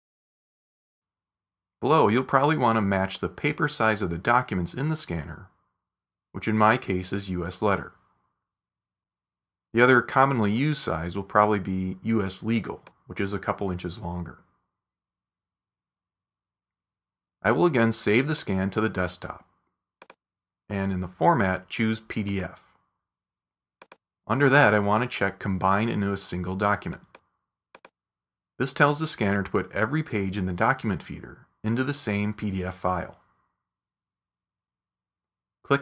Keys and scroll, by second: 20.8 e.